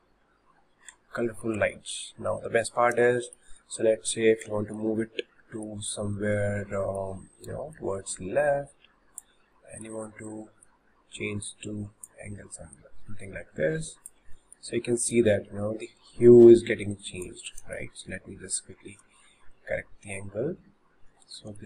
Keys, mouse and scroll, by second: 7.7 click, 9.6-10.7 middle drag, 10.7 click, 12.8 click, 14.4 shift+middle click, 15.1 click, 17.6-18.0 middle drag, 21.5 h.